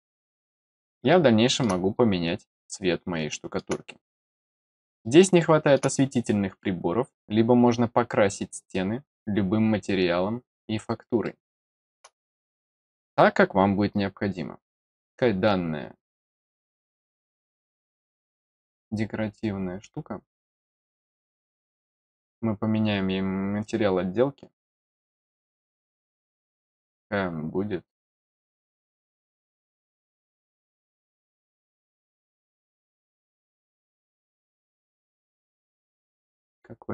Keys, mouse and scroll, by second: 1.0 middle click, 1.8-2.2 scroll down 2, 2.7 middle click, 4.0 middle click, 5.0 middle click, 6.0-6.3 scroll up 2, 10.5 scroll down 1, 11.2 middle click, 12.2 middle click, 13.1 scroll up 1, 13.9 scroll up 1, 14.6 click, 17.7 click, 20.6 click, 24.4 scroll up 1, 25.0-25.8 scroll up 1, 25.9-26.7 scroll up 2, 26.8 scroll up 1, 27.1 scroll down 1, 27.9-36.9 scroll down 2.